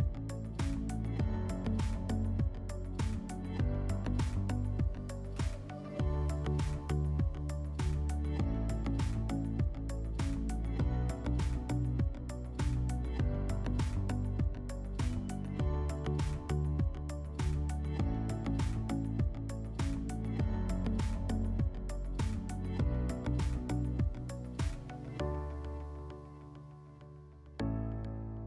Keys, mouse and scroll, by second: 1.0 ctrl+click, 1.2 ctrl+click, 3.3-4.7 middle drag, 7.1 ctrl+click, 7.2 ctrl+click, 9.5 alt+middle click, 12.7 ctrl+click, 18.7 ctrl+click, 23.8 click, 27.4 click, 28.3 alt+click.